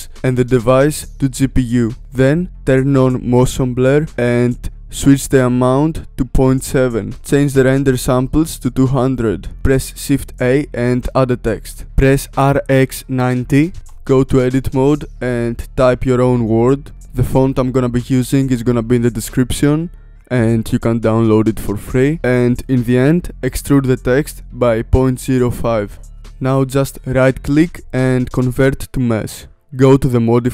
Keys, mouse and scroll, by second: 3.8-4.4 scroll down 2, 4.4-6.3 drag, 7.1 click, 8.1 KP_0, 8.8 ctrl+z, 10.2 shift+a, 12.0 r, 13.8 Tab, 14.1-15.4 typing, 15.7 Tab, 17.0 click, 18.2 click, 24.4-26.0 drag, 27.3-29.5 right drag, 29.5 click.